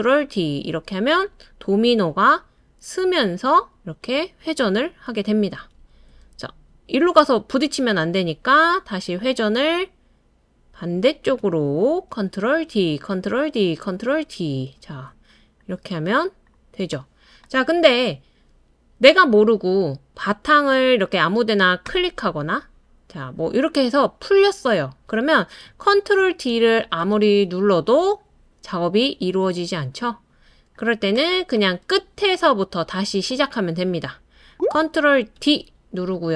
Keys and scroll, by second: 0.0 super+d, 0.7 super+d, 11.6 super+d, 12.1 super+d, 12.5 super+d, 25.9 super+d, 26.7 super+d, 27.1 super+d, 35.3 super+d.